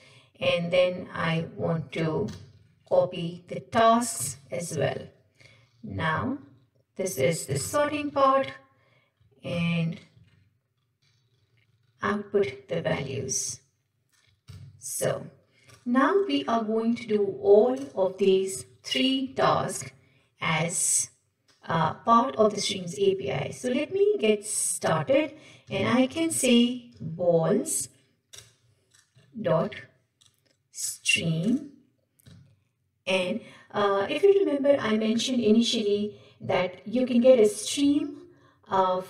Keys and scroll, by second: 2.3 ctrl+c, 2.8 ctrl+Tab, 4.2 ctrl+v, 5.0 ctrl+Tab, 7.6 ctrl+c, 8.2 ctrl+Tab, 9.5 ctrl+v, 10.4 ctrl+Tab, 12.9 ctrl+c, 13.4 ctrl+Tab, 14.5 ctrl+v, 19.2 Tab, 30.8 Return, 34.1 Escape.